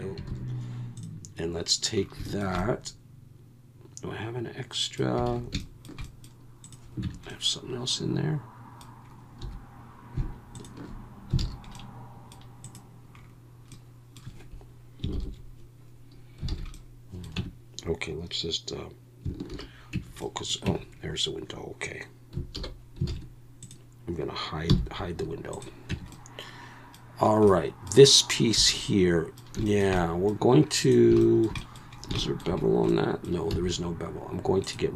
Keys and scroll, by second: 0.3 alt+a, 5.3 alt+a, 7.0 Tab, 9.4 3, 11.4 alt+a, 15.1 ctrl+l, 16.5 alt+a, 17.4 Tab, 19.5 shift+h, 19.9 Tab, 20.6 Tab, 22.6 alt+h, 23.1 alt+a, 24.7 h, 25.9 Tab, 28.5 3, 33.5 x.